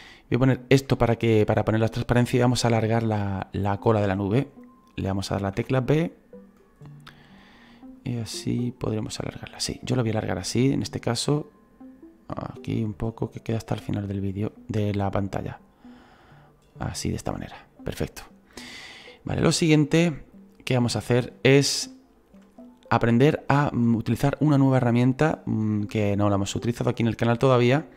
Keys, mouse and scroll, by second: 0.4-6.6 drag, 6.6 b, 8.0-12.5 drag, 12.5-13.7 scroll down 2, 13.7-27.9 drag.